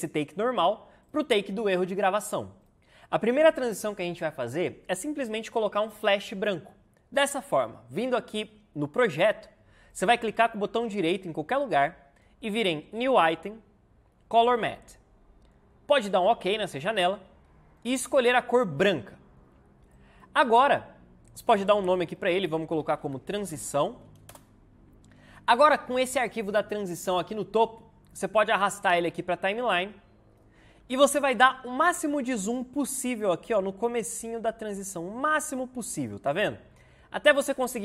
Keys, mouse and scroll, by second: 22.2-24.1 typing.